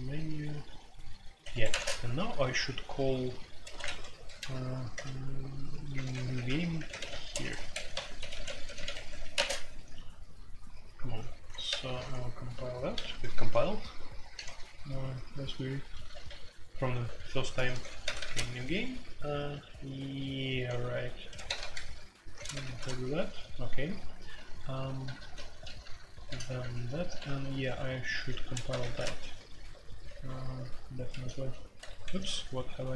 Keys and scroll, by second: 1.5 Escape, 1.7-4.9 typing, 1.7 Tab, 3.8 Return, 4.9 Return, 6.0-9.3 typing, 7.5 Escape, 8.9 Escape, 9.0 F2, 9.5 Tab, 11.7 ctrl+c, 11.8 ctrl+c, 12.7-13.4 typing, 14.6 ctrl+u, 14.6 k, 15.1 ctrl+u, 15.8 ctrl+u, 16.2-17.7 typing, 18.0 ctrl+c, 18.2 ctrl+c, 20.3-22.5 typing, 21.4 ctrl+c, 21.6 ctrl+c, 22.5 ctrl+c, 22.6 ctrl+c, 23.8-25.0 typing, 25.0 ctrl+c, 25.2 ctrl+c, 25.6 ctrl+d, 26.2 ctrl+d, 26.2 typing, 26.6 ctrl+d, 27.1 ctrl+d, 28.1 typing, 28.7 ctrl+c, 28.8 ctrl+c, 29.7-32.2 typing, 30.2 ctrl+u, 30.6 ctrl+u, 32.0 Escape.